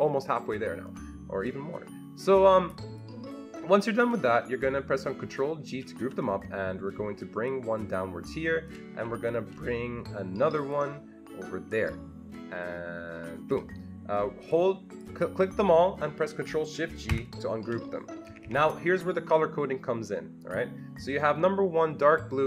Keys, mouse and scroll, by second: 1.4-7.5 drag, 5.7 ctrl+g, 7.5-15.0 ctrl+shift+drag, 15.0-18.2 ctrl+shift+drag, 17.1 ctrl+shift+g, 18.2 Escape, 18.4 Escape.